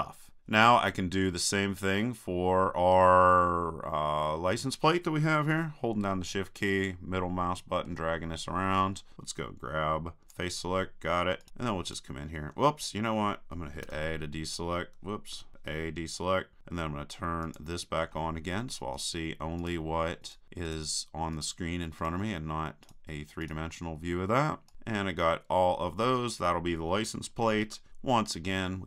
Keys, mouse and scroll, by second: 5.6-7.2 drag, 7.2 middle click, 8.3-10.2 middle drag, 10.2-11.7 drag, 11.4-13.5 right drag, 13.9 a, 15.4 a, 17.4-19.4 drag, 19.0-25.6 right drag, 28.5-28.8 middle drag.